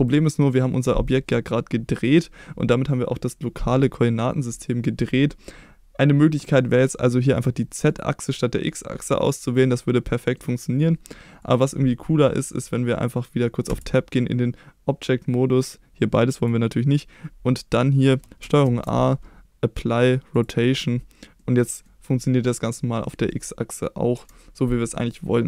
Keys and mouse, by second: 7.3 click, 7.9 click, 9.5 middle click, 11.4 click, 13.7 Tab, 16.4 click, 18.6 ctrl+a, 21.4-21.8 middle drag, 23.0 middle drag, 24.1 KP_1.